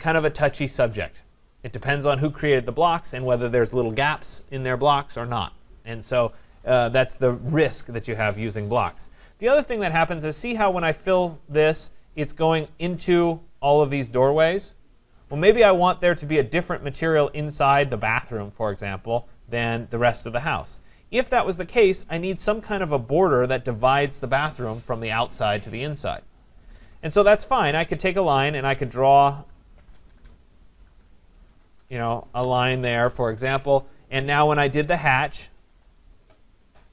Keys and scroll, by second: 21.6 Escape, 32.4 Return.